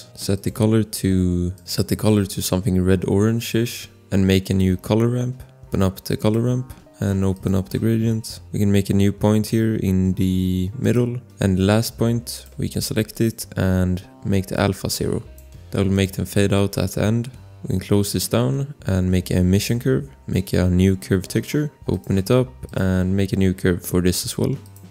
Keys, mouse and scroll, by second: 2.0 ctrl+v, 2.9 Return, 3.5 click, 5.5 scroll, 6.1 click, 6.5 scroll, 7.3 click, 10.8 click, 12.3 click, 14.2 click, 15.9 click, 17.4 click, 18.2 click, 21.4 click, 21.9 scroll, 22.0 click, 24.1 click, 24.4 scroll, 24.6 click.